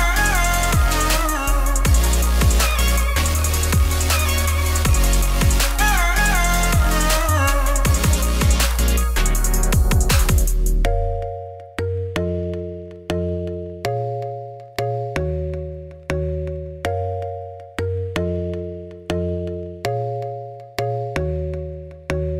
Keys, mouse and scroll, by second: 0.0-0.3 scroll up 1, 0.3 click, 0.6 middle click, 0.8 Tab, 1.1-3.0 alt+drag, 3.0 Tab, 3.2 scroll down 4, 3.3 middle click, 4.1-7.1 drag, 10.3-14.4 typing, 13.2-13.6 scroll down 10, 15.5 middle click, 16.3 g, 17.6-18.1 scroll down 1, 18.1 KP_1, 18.2 KP_3, 19.0 e, 20.3 middle click, 20.7 scroll up 1, 21.7 scroll down 2.